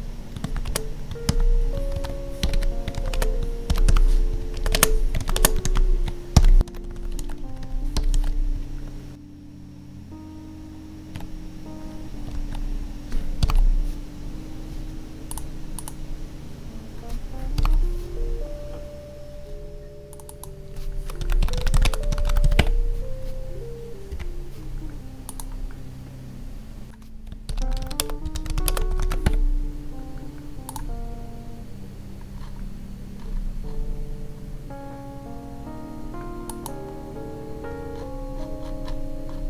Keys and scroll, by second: 0.6 space, 3.1 space, 4.3 Right, 4.5 space, 4.6 Left, 4.7 space, 5.3 space, 6.6 space, 7.2 ctrl+s, 7.4 Right, 8.1 ctrl+s, 8.5 Right, 9.1 ctrl+Up, 12.3 ctrl+Tab, 13.4 ctrl+b, 17.6 ctrl+b, 21.8 space, 24.1 F11, 28.0 space, 28.7 space.